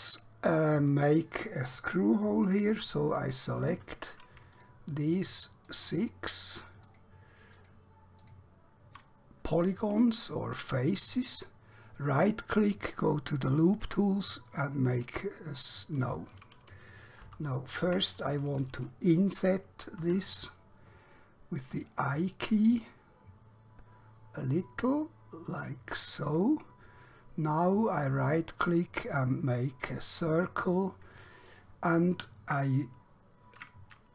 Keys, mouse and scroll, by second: 2.7 3, 3.4 click, 5.3 shift+click, 6.5 shift+click, 7.0 shift+click, 7.6 shift+click, 8.3 shift+click, 11.9 right click, 14.5 click, 17.0 ctrl+Num_Lock, 17.2 z, 20.1 i, 26.2 click, 27.7 right click, 32.4 click, 32.7 scroll up 1.